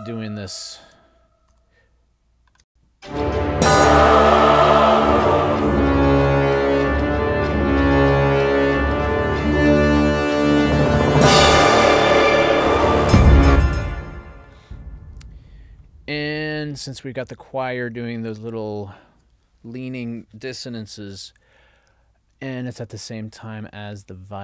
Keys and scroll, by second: 2.7 space, 13.5 space.